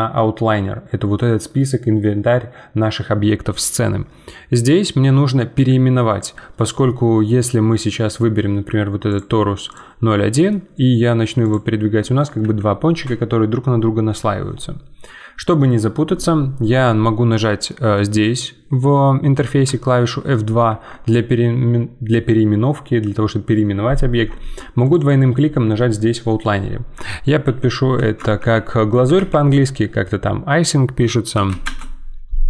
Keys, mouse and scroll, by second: 7.2-9.1 scroll down 1, 9.1 click, 10.2 g, 12.4 ctrl+z, 17.7-19.6 middle drag, 19.6 F2, 24.8-32.4 drag.